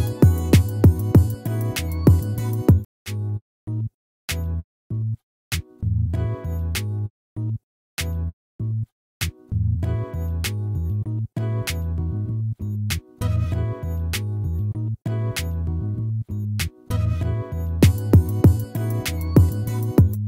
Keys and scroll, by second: 18.6 ctrl+-.